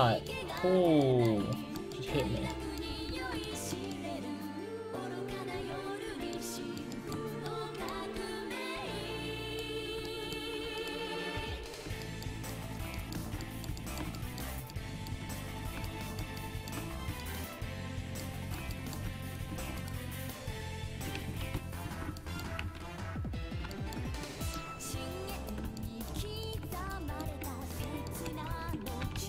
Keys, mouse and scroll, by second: 3.1 alt+z, 6.0 alt+z, 8.2 alt+z, 8.8 alt+z, 9.5-13.4 right drag, 12.1 click, 13.1-14.9 middle drag, 15.1 middle click, 16.2 middle click, 17.6 middle click, 19.3-20.9 right drag, 20.9 ctrl+x, 21.1 a, 21.4 ctrl+t, 21.9 a, 22.8 alt+z, 23.4 alt+z, 25.4-27.6 drag, 28.5 ctrl+x, 28.9 a, 29.2 ctrl+t.